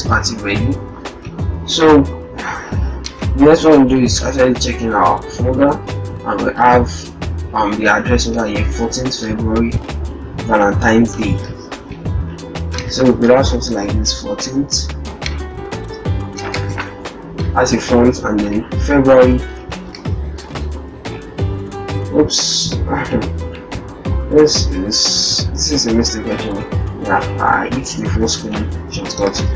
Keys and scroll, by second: 16.4 ctrl+Return, 19.5 ctrl+alt+shift+Return, 19.9 ctrl+alt+shift+f, 27.8 ctrl+a, 29.2 shift+f.